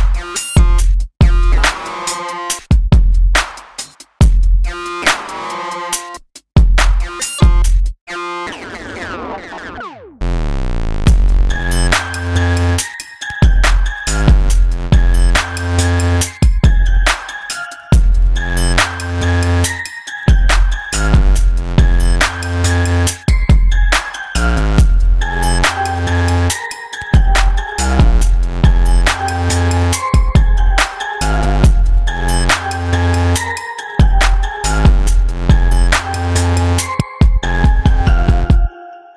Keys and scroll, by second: 2.1 ctrl+z, 7.3 ctrl+z.